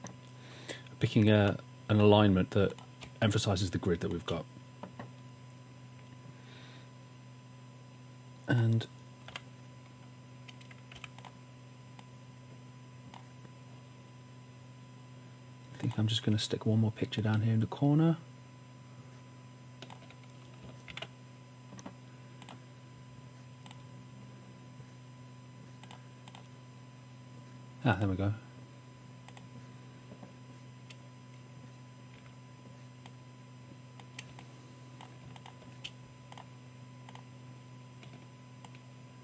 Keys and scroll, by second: 1.5-1.9 typing, 3.0 typing, 9.3 w, 11.0 v, 20.9 super+d, 32.1 v, 34.3 space.